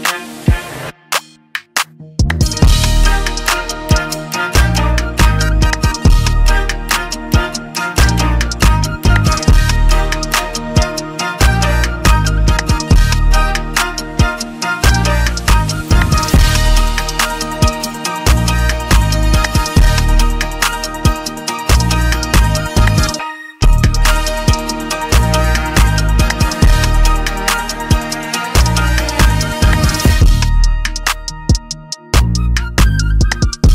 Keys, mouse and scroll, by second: 3.5 click, 4.1 scroll, 5.3 click, 6.4 click, 7.5 Delete, 7.5 click, 9.3 click, 15.8 ctrl+e, 15.8 click, 20.2 scroll down 1, 23.8 click, 23.8 scroll down 4, 26.7 click, 27.9 click, 29.3 click, 31.3 click.